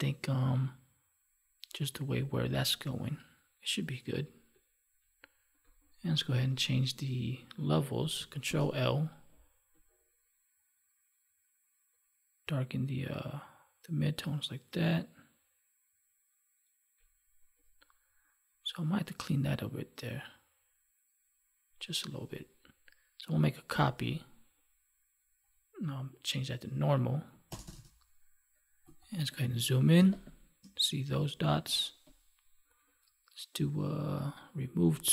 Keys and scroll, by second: 8.4 ctrl+l, 23.6 ctrl+j, 29.9 space.